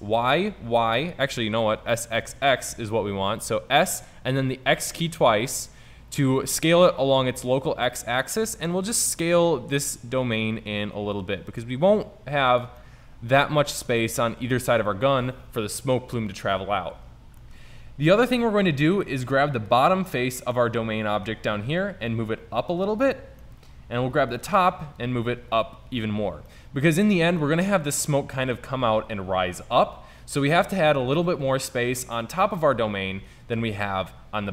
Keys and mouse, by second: 1.9 s, 12.7 click, 13.1-17.5 middle drag, 19.8 right click, 20.9 middle click, 23.5 middle click, 23.7-24.4 middle drag, 24.4 right click, 26.8 middle click.